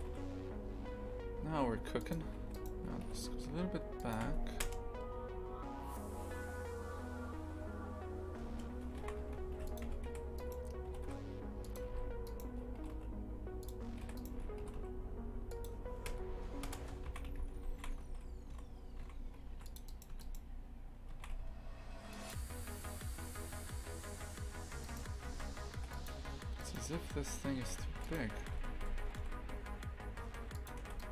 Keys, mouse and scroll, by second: 2.4 3, 2.5 right click, 3.0 g, 4.2 Tab, 4.6 KP_0, 8.4 KP_0, 9.0 shift+f, 9.8 Tab, 10.3 right click, 10.9 g, 11.9 2, 12.2 right click, 12.8 g, 14.0 3, 14.1 right click, 14.6 g, 16.0 KP_0, 16.6 KP_0, 17.0 shift+f, 19.8 right click, 20.1 Tab, 20.2 right click, 21.1 shift+f, 24.8 right click, 25.3 shift+f, 26.6 right click, 27.5 shift+f, 28.4 s, 31.0-31.1 right drag.